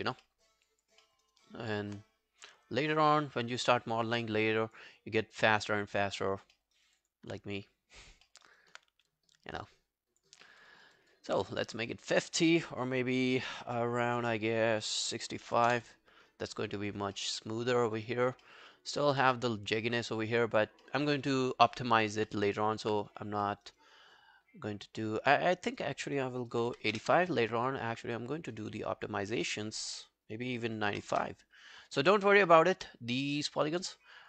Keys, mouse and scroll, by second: 0.0 scroll down 2, 0.3 alt+middle click, 0.7 alt+click, 1.0 alt+middle click, 1.3 alt+right click, 3.4 alt+middle click, 3.6 alt+right click, 6.6 alt+middle click, 6.8 alt+right click, 7.0 alt+click, 8.5 alt+right click, 10.5 alt+middle click, 10.7 alt+right click, 11.0 alt+click, 15.2-16.0 typing, 16.4 Return, 17.2 alt+middle click, 17.4 alt+right click, 17.6 alt+click, 17.9 alt+right click, 18.1 alt+click, 18.5 alt+middle click, 18.8 alt+scroll down 1, 18.9 alt+click, 20.0 alt+middle click, 20.2 alt+right click, 20.4 alt+click, 20.9 alt+middle click, 21.1 alt+right click, 21.8 alt+middle click, 22.0 alt+right click, 22.3 alt+middle click, 22.5 alt+right click, 23.5 alt+middle click, 23.7 alt+right click, 23.9 alt+click, 26.3-27.2 typing, 30.6-31.4 typing, 32.0 Return, 32.5 alt+middle click, 32.7 alt+scroll down 1, 33.6 alt+scroll, 33.8 alt+middle click, 34.1 alt+scroll down 1.